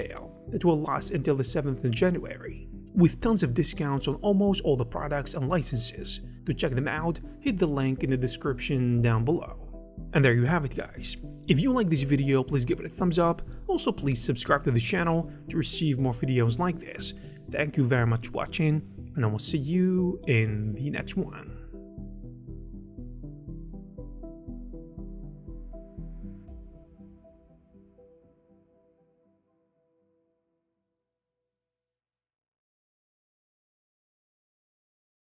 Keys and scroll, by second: 13.0 e.